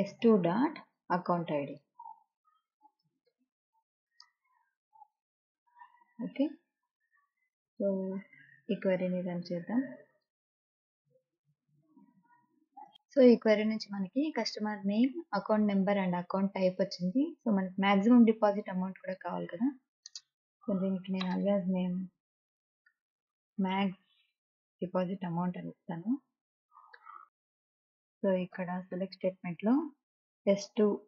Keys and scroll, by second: 0.8-3.5 typing, 4.8-7.0 typing, 21.0-22.2 typing, 24.4-27.8 typing, 29.8 ', 30.8-31.0 typing.